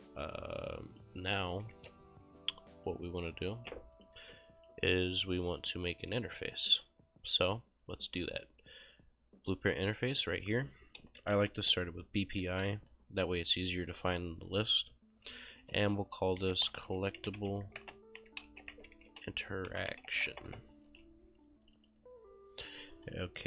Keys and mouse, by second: 0.2 click, 1.3 click, 1.8 ctrl+s, 2.8 click, 3.4 right click, 3.6 ctrl+space, 4.0 click, 4.4 s, 4.7 click, 6.1 right click, 7.9 click, 10.2 click, 11.0-12.5 typing, 15.6-20.9 typing, 20.9 ctrl+shift+s, 21.7 click.